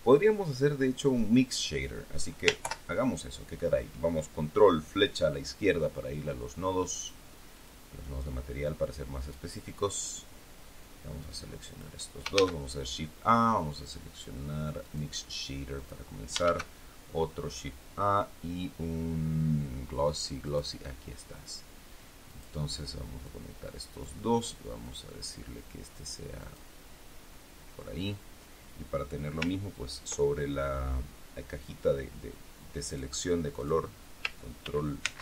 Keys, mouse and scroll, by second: 2.5 ctrl+Left, 6.9 click, 7.5 click, 8.6 click, 11.1 click, 12.2 shift+a, 14.7 click, 15.7 click, 16.3 shift+a, 20.3 click, 22.2 click, 23.2 click, 24.7 click, 26.3 click, 32.8 click, 33.5 click, 34.5 ctrl+v, 34.9 ctrl+c.